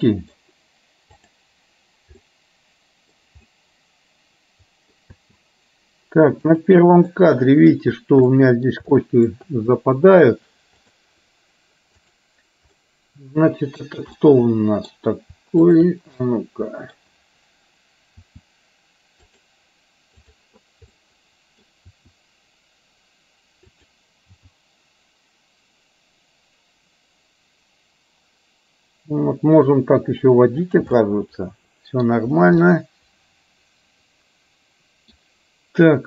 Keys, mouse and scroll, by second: 1.2 click, 2.3-3.2 middle drag, 3.4-5.1 middle drag, 5.6 space, 6.4 click, 7.2-7.8 middle drag, 8.3-8.8 middle drag, 9.1-9.4 shift+middle drag, 10.9 click, 12.1 drag, 12.8-13.9 middle drag, 14.3 middle click, 15.8 shift+click, 16.3 middle click, 18.9 r, 20.3 click, 20.9 middle click, 22.6 r, 25.8 g, 31.1-32.2 middle drag, 32.7-35.2 middle drag.